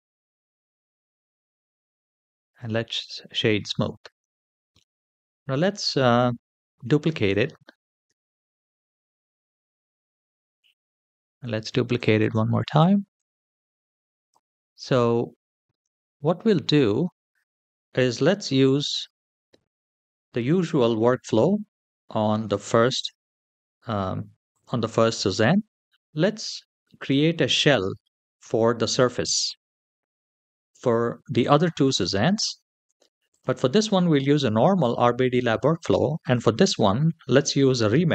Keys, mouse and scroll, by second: 0.3 shift+middle click, 1.2 Tab, 1.6-2.2 scroll down 1, 2.2 right click, 2.2 scroll down 1, 3.7-4.2 scroll down 2, 4.2 shift+middle drag, 4.6 middle drag, 5.1 scroll down 2, 5.6 middle click, 6.0-6.6 shift+middle drag, 7.8 shift+d, 8.9 g, 10.8-11.2 shift+middle drag, 12.0 shift+d, 14.4-14.8 middle drag, 14.9-15.2 scroll down 2, 15.6-16.5 middle drag, 16.8-17.2 shift+middle drag, 17.5 middle click, 18.5-18.8 shift+middle drag, 24.3 click, 26.8 click, 27.8-29.8 scroll up 2, 29.8 scroll up 1, 33.1 click, 33.5 click, 35.8-36.1 shift+middle drag, 36.4 click.